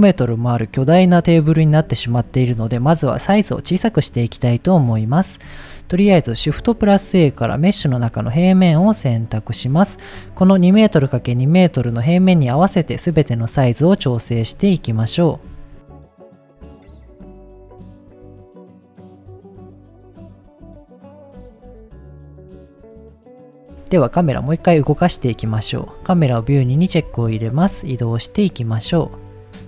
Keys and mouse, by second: 4.9-5.4 middle drag, 6.4 shift+a, 9.3-10.1 middle drag, 11.7-12.2 middle drag, 12.9-14.0 drag, 14.7-15.4 middle drag, 15.8 s, 16.7 click, 16.9 KP_7, 17.3 s, 17.5 click, 17.5 g, 18.7 click, 18.9 middle click, 19.3 middle click, 19.7 g, 20.9 click, 21.1 middle click, 21.6 shift+middle click, 21.9 s, 22.7 click, 22.8 g, 22.9 z, 23.3 middle click, 24.1-24.8 middle drag, 25.4 KP_0, 26.1 click, 27.1-27.6 shift+middle drag, 29.1 shift+middle click.